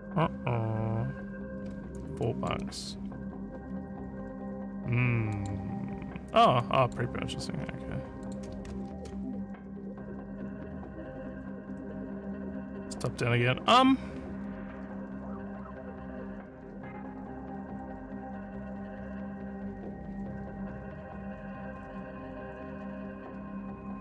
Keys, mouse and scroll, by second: 2.2 click, 5.3 click, 6.6 click, 7.5 scroll up 2, 8.2 click, 8.9 ctrl+w.